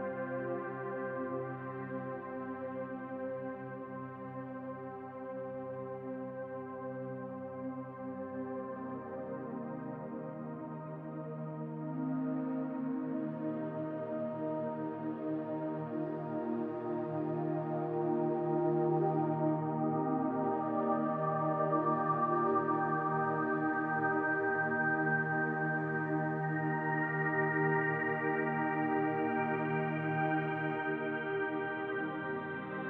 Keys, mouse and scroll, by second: 0.3 click, 0.8 shift+click, 2.3 click, 2.7 middle click, 3.6 shift+click, 3.9 click, 4.9 ctrl+a, 6.4 middle click, 6.8 scroll down 1, 6.9 middle click, 7.7 middle click, 8.6 click, 9.7 ctrl+a, 11.2 click, 11.6 middle click, 12.8 click, 14.3 click, 15.8 middle click, 16.6-17.3 scroll down 4, 17.0 middle click, 21.1-22.1 scroll up 4, 21.5 middle click, 22.1 click, 22.6 middle click, 23.9 click, 24.8 middle click, 25.7 middle click, 28.1 g, 32.3 middle click.